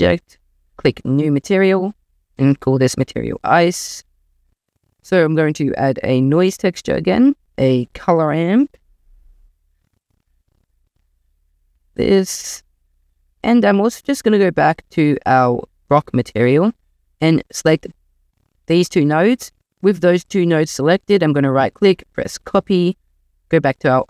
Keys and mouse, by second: 0.7 click, 1.3-2.6 drag, 3.5 click, 5.0 shift+a, 7.9 shift+a, 10.8 drag, 11.2 click, 11.6 click, 12.4 click, 17.5 drag, 21.4-22.6 right drag, 23.5 click.